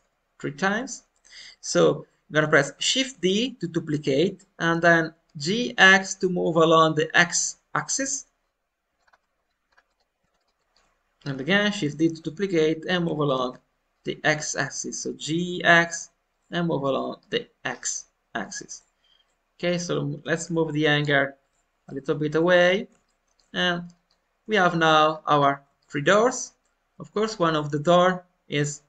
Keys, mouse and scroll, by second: 0.8-3.0 middle drag, 3.0 shift+d, 9.0-9.7 scroll up 3, 9.2 middle click, 9.7 scroll down 1, 9.9-11.6 middle drag, 11.6 shift+d, 13.3 g, 16.8 middle click, 17.6-17.9 scroll down 2, 17.9 middle click, 18.6 click, 19.2 middle click, 20.1 g, 21.8-25.1 middle drag, 25.1-25.6 scroll up 2, 25.7-27.4 shift+middle drag, 27.4 click.